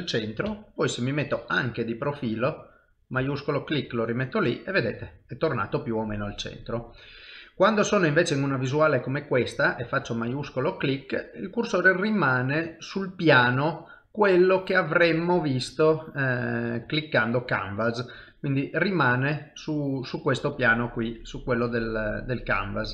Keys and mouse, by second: 0.5 KP_1, 2.8 shift+right click, 3.6 middle click, 7.5 middle click, 14.3 click, 15.8 click, 19.6 click, 22.4 middle click.